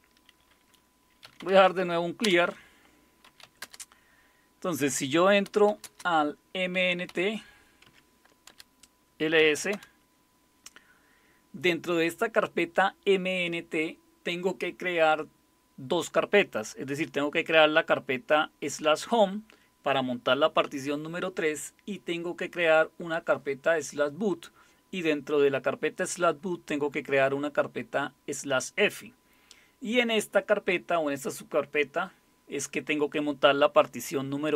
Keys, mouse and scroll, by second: 1.0-3.7 typing, 5.2-10.1 typing.